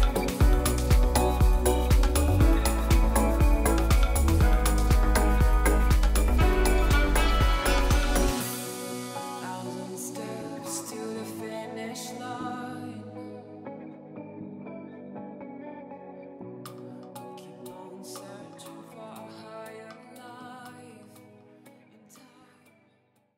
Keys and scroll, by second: 0.0 space, 1.5 space.